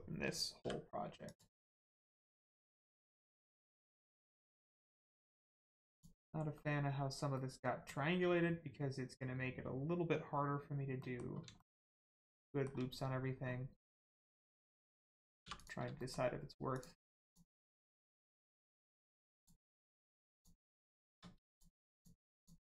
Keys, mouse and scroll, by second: 0.5 m, 1.2 click, 2.3 click, 2.3 scroll down 1, 3.0 shift+middle click, 3.3 middle click, 3.4 middle click, 3.7 scroll up 1, 4.1 middle click, 4.4-4.8 scroll up 1, 4.9 middle click, 5.8 click, 6.4-6.8 scroll up 1, 7.3 middle click, 10.9 scroll down 1, 10.9 middle click, 11.5 shift+middle click, 11.9 middle click, 12.0 middle click, 12.4 shift+middle click, 13.4 scroll up 1, 15.9 shift+middle click, 16.6 shift+click, 18.1 shift+middle click, 18.8 shift+click, 19.3 shift+click, 20.3 shift+click, 21.4 shift+click, 21.8 shift+click.